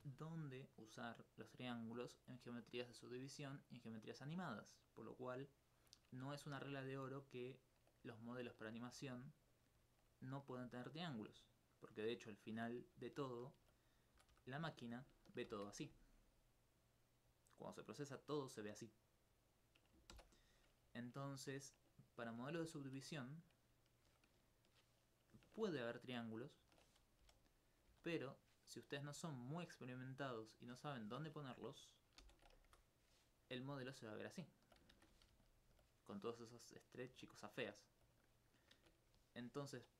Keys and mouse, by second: 5.8 middle click, 9.4 alt+click, 10.2 alt+right click, 11.4 alt+click, 11.8 alt+click, 11.9 alt+click, 14.7 alt+click, 15.5 ctrl+t, 20.1 ctrl+z, 21.1 alt+click, 21.2 alt+click, 22.8 alt+click, 24.0 Tab, 25.6 ctrl+1, 26.6 ctrl+2, 27.2 ctrl+z, 27.9 ctrl+z, 29.5 middle click, 31.1 Tab, 32.2 ctrl+t, 32.7 ctrl+Tab, 33.7 alt+click, 34.2 alt+click, 35.0 shift+space, 35.4 alt+click, 37.2 alt+click, 37.8 alt+click, 38.8 shift+space.